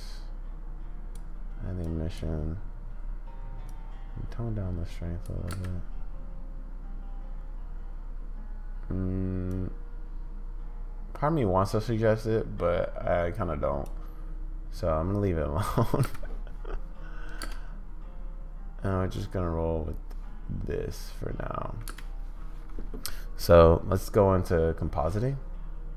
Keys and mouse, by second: 3.8 click, 5.6 space, 9.5 click, 12.6 click, 16.1 space, 17.4 space, 21.9 space.